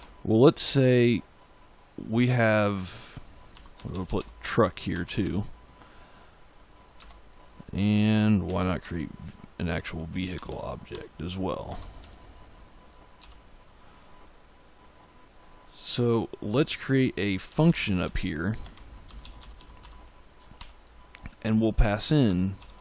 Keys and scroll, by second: 2.2 Tab, 3.2-5.6 typing, 6.9 Return, 7.8-11.9 typing, 13.1 ., 17.1-22.8 typing.